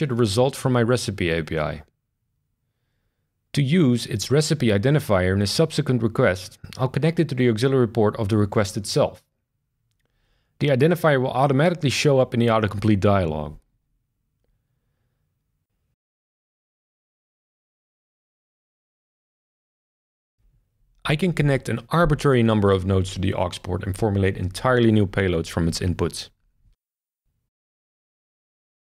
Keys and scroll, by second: 9.7 BackSpace, 9.9 BackSpace, 10.7 shift+[, 10.9 shift+[, 11.7 Down, 11.8 Down, 12.0 Down, 12.4 Return, 17.5 shift+super+r.